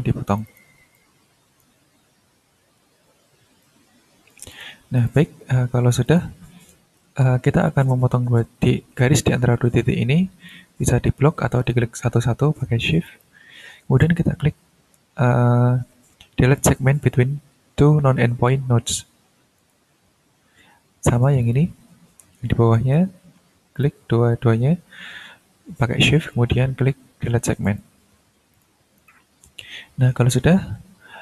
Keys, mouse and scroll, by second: 0.3 click, 0.9 ctrl+click, 1.9-2.2 ctrl+scroll down 2, 2.2 ctrl+scroll up 2, 2.9 ctrl+scroll up 2, 3.6-4.8 ctrl+drag, 5.0 ctrl+click, 5.3-6.0 ctrl+scroll down 1, 6.0 ctrl+click, 6.6-7.6 scroll up 4, 7.6-10.7 ctrl+drag, 11.6 click, 13.0 shift+click, 19.6 click, 20.3 scroll down 2, 21.4 ctrl+click, 21.8-22.7 ctrl+scroll down 5, 23.7 shift+click, 24.1-25.3 shift+scroll up 3, 27.6 click, 28.5 click, 28.9 click, 29.4 scroll up 1, 30.0 ctrl+scroll down 1, 30.9 ctrl+scroll up 1.